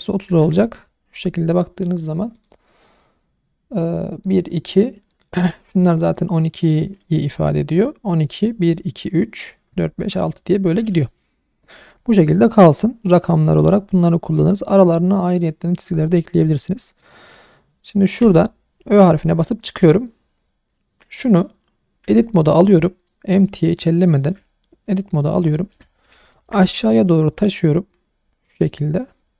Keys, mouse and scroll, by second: 1.6-2.3 scroll down 1, 2.3 click, 16.4-17.0 scroll up 1, 17.0 click, 18.2 /, 21.2 middle click, 22.0 Tab, 22.5 middle click, 23.6-25.3 middle drag, 25.7 a, 26.1 scroll up 2, 26.3 shift+middle click, 27.3 click, 28.7 middle click, 29.1 scroll up 1.